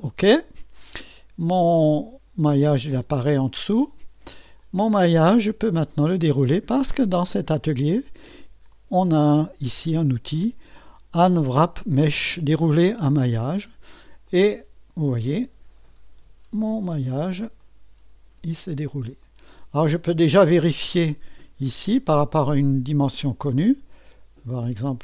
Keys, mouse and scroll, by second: 2.9 space, 4.6-5.9 drag, 8.7-11.2 drag, 13.2-16.3 drag, 16.1-17.4 typing, 17.6-18.7 drag, 18.7-19.7 scroll up 1, 21.7-23.3 drag, 23.0-23.8 typing.